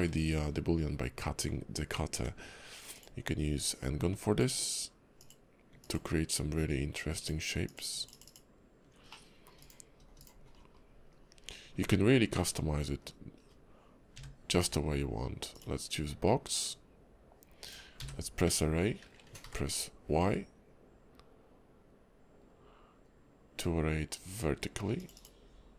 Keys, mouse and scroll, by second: 0.4-1.4 scroll up 3, 1.5 scroll down 2, 2.1 d, 3.7 ctrl+click, 8.5 ctrl+click, 9.1 middle click, 10.6 scroll down 5, 11.1 KP_5, 11.4 scroll up 2, 11.8 `, 12.3 `, 13.0 KP_5, 13.4 scroll up 2, 14.3 f, 14.6 d, 16.6 click.